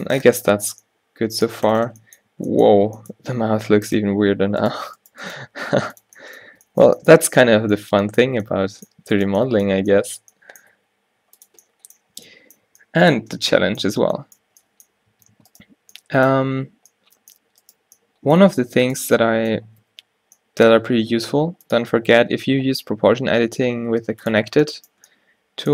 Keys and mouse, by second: 2.4 Tab, 2.9 Tab, 3.5 Tab, 4.8 g, 5.4 g, 6.6 Tab, 9.2 Tab, 9.9 click, 9.9 z, 10.9 g, 12.3-14.5 typing, 15.3 Tab, 15.5 Tab, 18.7 z, 20.0 z, 23.5-24.8 middle drag.